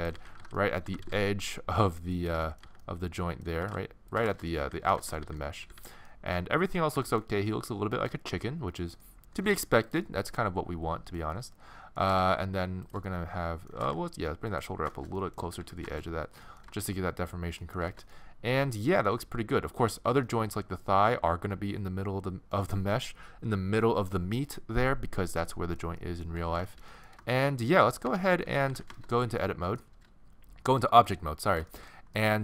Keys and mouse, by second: 0.2 z, 0.9 g, 2.6-5.8 typing, 6.5 middle click, 8.8-10.7 middle drag, 9.5 g, 12.0 g, 13.8 g, 15.4 a, 15.6 a, 19.8-22.1 middle drag, 25.5 middle click, 28.1 Tab, 28.4 z, 31.2 middle click.